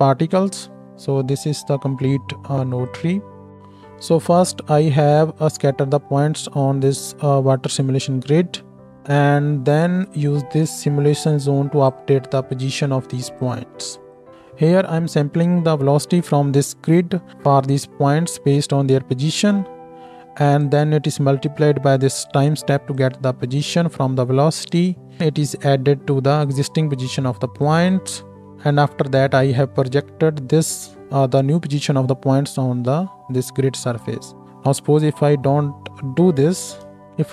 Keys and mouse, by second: 0.8-2.8 drag, 2.8-3.5 middle drag, 3.5-10.1 drag, 3.5 x, 4.7 ctrl+shift+middle click, 4.7 ctrl+shift+right click, 10.1-14.3 middle drag, 14.3-20.6 drag, 20.6 middle click, 20.7-21.4 drag, 21.4-25.2 middle drag, 25.2 click, 25.6-27.8 middle drag, 27.8-37.3 drag, 36.3 m.